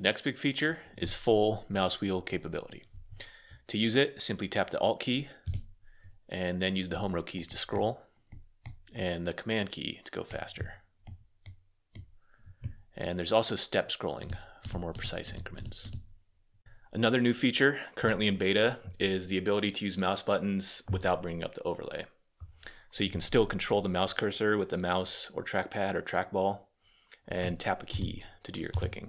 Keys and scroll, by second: 4.9-5.7 typing, 7.1 j, 7.5 j, 7.7 j, 7.8 j, 10.5 j, 11.2 k, 11.4 k, 11.5 k, 13.7-15.5 typing, 27.6 Return.